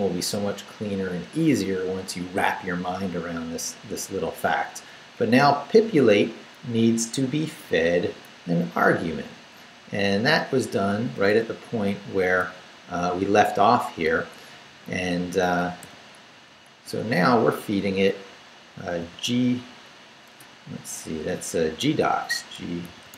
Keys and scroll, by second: 3.8 Up, 5.1 Up, 5.9 Right, 8.0 Right, 9.3 Up, 11.3 Down, 12.6 Down, 14.0 Right, 15.8 i, 17.4 Left, 19.0 g, 20.4 BackSpace, 22.3-23.1 typing.